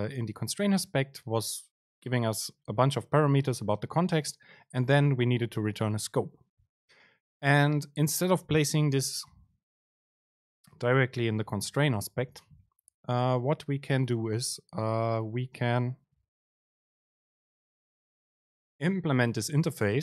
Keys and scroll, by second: 16.6 ctrl+shift+super+z.